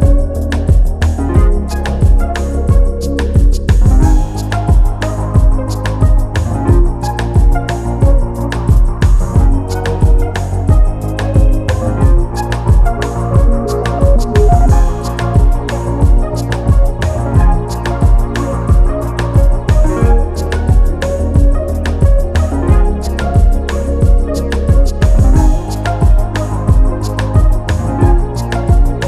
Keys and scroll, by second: 15.6 ctrl+t, 28.2 e.